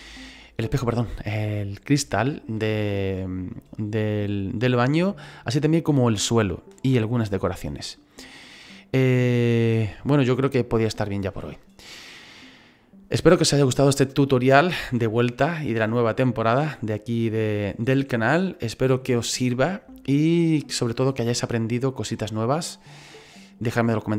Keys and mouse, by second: 0.4 typing.